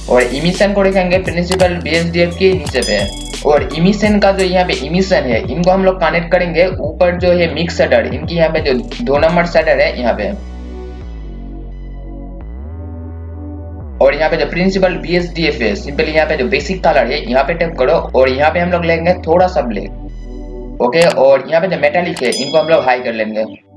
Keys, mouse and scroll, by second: 3.1-5.4 scroll up 1, 5.4 scroll down 1, 6.5 click, 7.7-10.4 scroll up 1, 10.4 scroll down 1, 10.7 click, 11.1 scroll down 1, 11.5-13.9 drag, 13.9-17.2 scroll up 1, 17.2-23.7 drag.